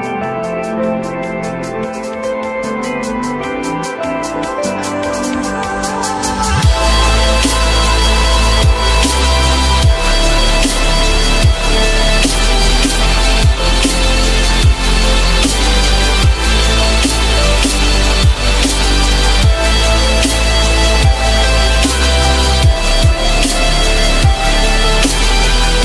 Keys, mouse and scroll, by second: 11.3 F3, 12.3 alt+middle click, 12.8 alt+middle click, 15.3 z, 17.3 z, 23.0 F3, 23.4 F3.